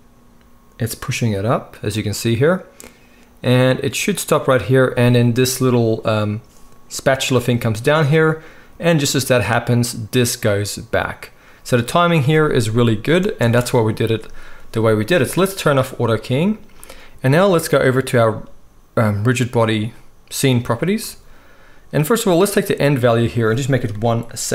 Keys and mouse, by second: 13.4 space, 15.8-22.7 middle drag, 22.7-24.5 drag.